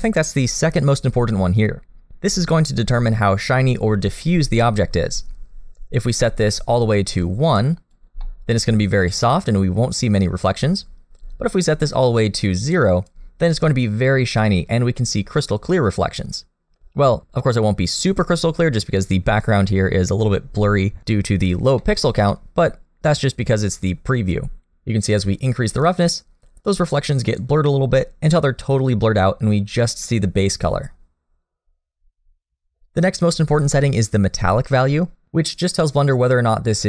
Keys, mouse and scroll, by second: 6.8 click, 8.2 middle click, 10.6-11.7 scroll up 1, 11.7 click, 13.7 middle click, 15.4 middle click, 21.8 middle click, 25.8 click.